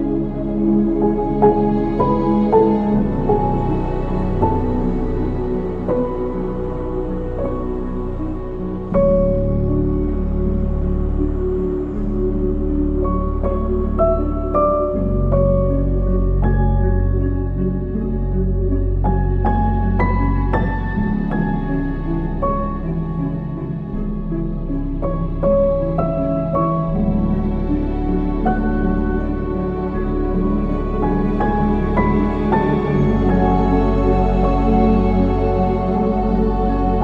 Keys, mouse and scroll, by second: 5.2-6.7 drag, 6.7-8.3 scroll down 4, 8.3-9.0 drag, 9.8-11.8 middle drag, 11.8 click, 13.4 shift+d, 14.5 g, 18.0 ctrl+z, 18.6 g, 21.9 r, 24.3 ctrl+s, 24.5-26.5 middle drag, 26.5 KP_0, 27.4-28.7 scroll up 4, 29.9 ctrl+s, 31.0 click, 32.0 click, 34.6 click.